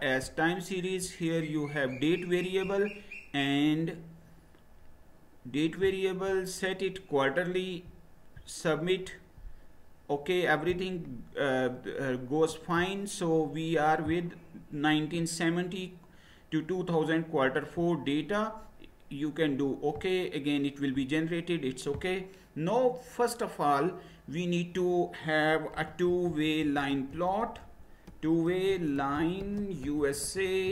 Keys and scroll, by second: 25.5-30.7 typing.